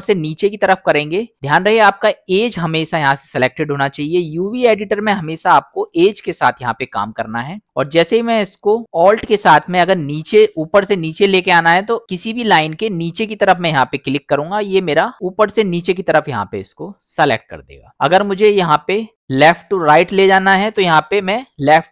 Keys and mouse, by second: 0.2-0.7 middle drag, 13.4 alt+click, 14.7-17.8 middle drag.